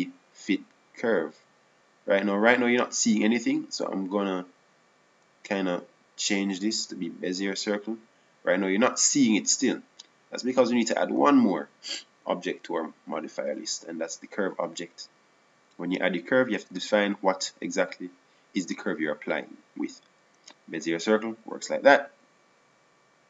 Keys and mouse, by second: 0.2-2.0 drag, 5.6-7.3 drag, 7.8-10.1 drag, 13.1-14.7 drag, 16.2 click, 18.8-20.9 drag.